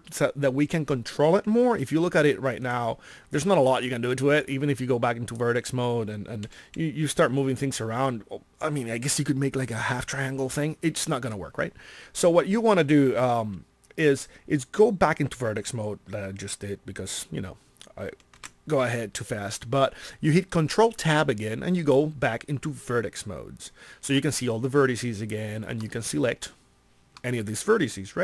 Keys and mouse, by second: 3.4 ctrl+Tab, 6.4 g, 18.3 ctrl+Tab.